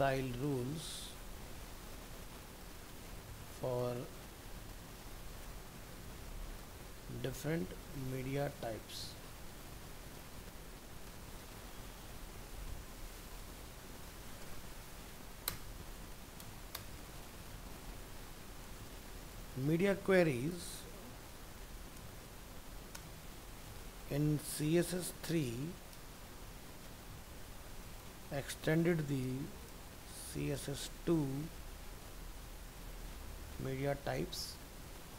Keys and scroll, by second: 11.4 ctrl+s.